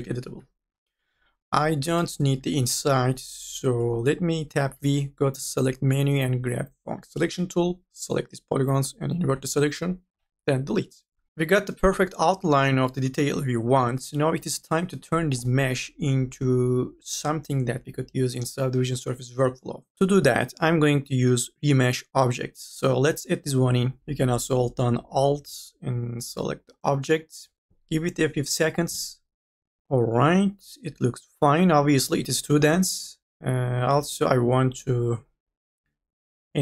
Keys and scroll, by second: 0.7 3, 2.1 3, 4.8 v, 9.2 u, 9.5 i, 10.1 Delete, 15.3 n, 15.7 b, 19.9 4, 24.1 ctrl+z.